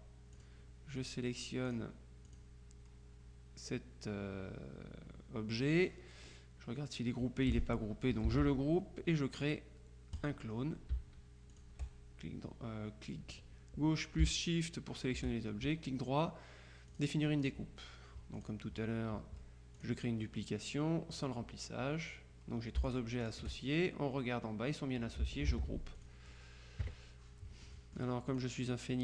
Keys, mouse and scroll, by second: 0.5 click, 1.7 click, 8.4 ctrl+g, 10.3 click, 11.6 shift+click, 17.0 click, 18.4 click, 19.9 click, 23.0 shift+click, 25.6 ctrl+g, 26.1 ctrl+click, 26.9 KP_Subtract, 27.7-28.9 drag.